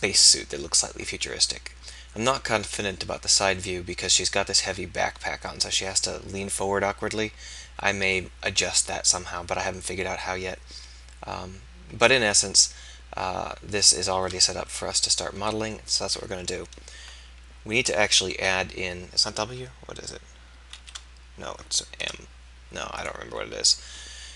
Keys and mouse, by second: 14.6 KP_3, 15.4 KP_1, 18.4 w, 20.7 shift+w, 22.1 m.